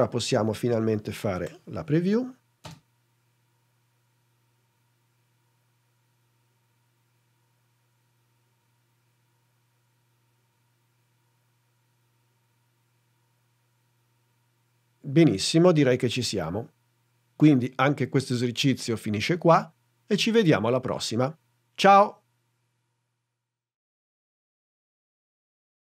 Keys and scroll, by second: 1.5 n.